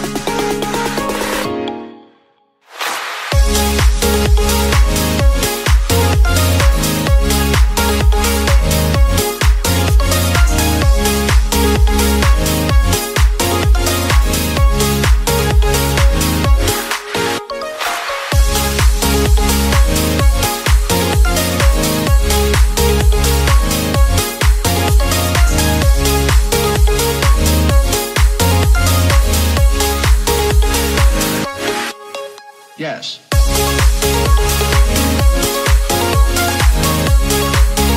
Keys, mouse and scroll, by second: 0.7 e, 1.7 click, 5.4 s, 6.7 click, 8.6-11.1 drag, 12.3 click, 12.8 Tab, 13.2-14.0 right drag, 14.0 scroll up 3, 14.3 Tab, 14.7 middle click, 15.5 click, 16.0 middle click, 16.8 shift+click, 17.5 middle click, 18.2 click, 19.7 s, 21.6 click, 22.5-23.7 middle drag, 23.7 ctrl+r, 25.8 ctrl+r, 28.6 l, 29.2 click, 30.9 middle click, 31.7 click, 33.5 s, 35.7 s, 37.5 middle click.